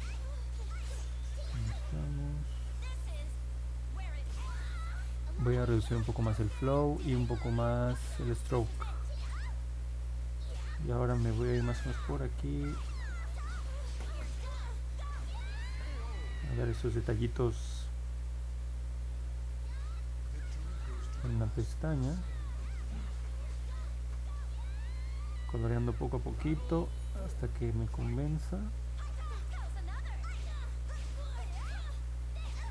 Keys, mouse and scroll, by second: 2.2 click, 2.7 click, 3.2 click, 13.2 click, 13.6 click, 14.1 click, 14.5 click, 14.9 click, 16.1 click, 16.4 click, 16.9 click, 17.2 click, 17.7 click, 18.0 click, 18.4 click, 18.8 click, 19.2 click, 19.6 click, 19.9 click, 20.3 click, 20.7 click, 21.2 click, 21.6 click, 22.0 click, 22.5 click, 22.9 click, 23.2 click, 23.6 click, 23.9 click, 24.3 click, 24.8 click, 25.1 click, 25.5 click, 25.8 click, 26.1 click, 26.4 click, 26.7 click, 27.0 click, 27.5 click, 27.9 click, 28.3 click, 29.1 click, 29.4 click, 31.5 click, 32.0 click, 32.5 click.